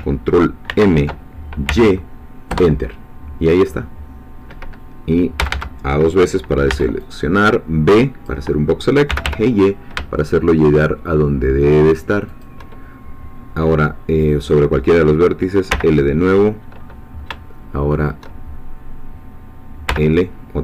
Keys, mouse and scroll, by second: 0.7 ctrl+m, 1.7 y, 2.5 Return, 5.4 a, 6.7 b, 7.0-8.4 drag, 9.1 g, 9.2 y, 12.3 shift+click, 15.7 l, 19.9 l.